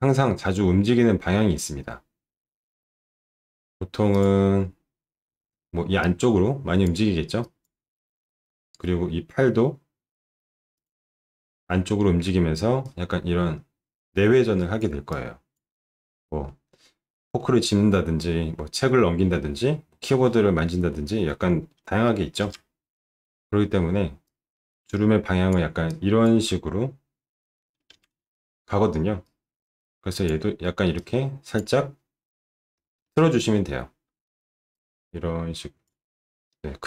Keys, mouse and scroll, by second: 29.2-30.2 drag, 30.9 click, 32.7 alt+middle click, 34.2 alt+middle click, 34.7-35.8 drag.